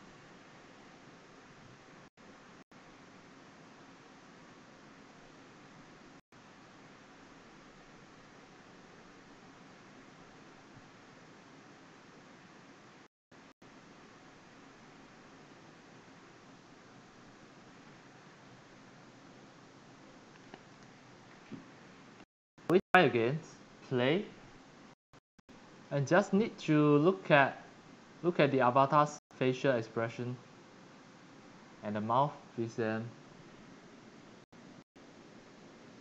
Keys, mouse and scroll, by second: 22.9 click, 24.1-29.5 drag, 28.4-33.0 typing, 35.3-36.0 typing.